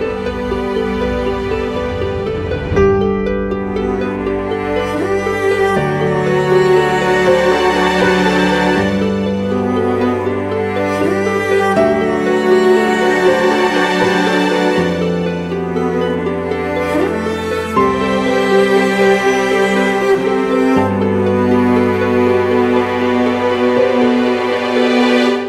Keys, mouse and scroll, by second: 3.3-3.6 typing, 4.5 double click, 14.2-16.0 scroll up 1, 16.6 alt+click, 21.3 right click, 22.5 shift+click.